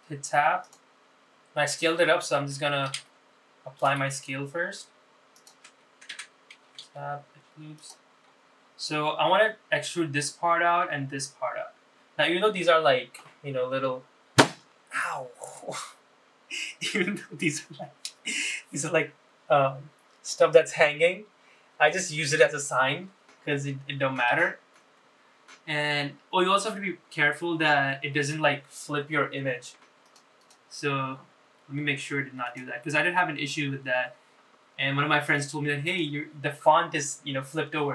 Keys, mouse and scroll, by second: 0.9 Tab, 1.8 click, 3.1 ctrl+a, 4.3 Tab, 5.0 ctrl+a, 7.3 Tab, 8.0 2, 8.9 click, 9.4-10.3 scroll up 3, 12.8-16.1 scroll down 2, 25.7 ctrl+r.